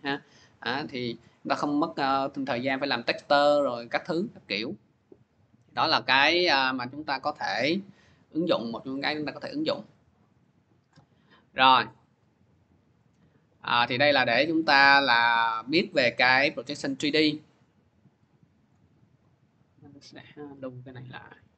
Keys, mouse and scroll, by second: 1.2 click, 2.4 click, 3.5 click, 4.9-8.6 drag, 9.2 click, 10.3 click, 11.8 click, 16.5 click, 17.4 click, 18.5 click, 20.1 click, 21.3 click.